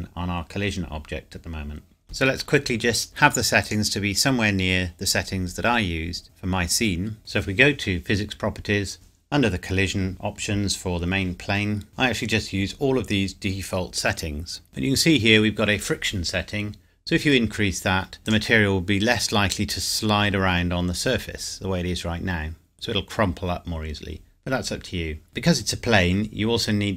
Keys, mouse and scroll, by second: 3.6 click, 6.2 click, 7.1-8.3 scroll up 1, 8.3 click, 18.2 click, 25.5-26.9 scroll up 1.